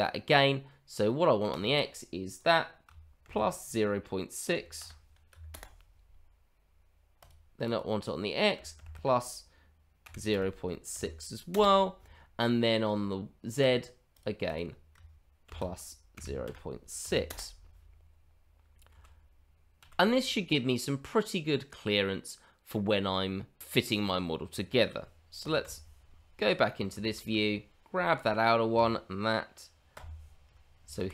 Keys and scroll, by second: 18.9 shift+z, 19.7 shift+z, 25.7 f, 27.0 shift+z, 30.0 f, 31.0 shift+z.